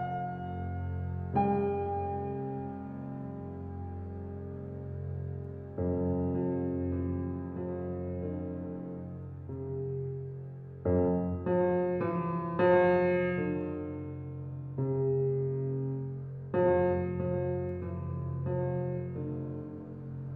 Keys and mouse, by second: 2.7 1, 3.2-5.4 ctrl+alt+drag, 12.6 r, 14.5 z, 16.4 Escape, 17.1 click, 18.3 r, 18.6 z.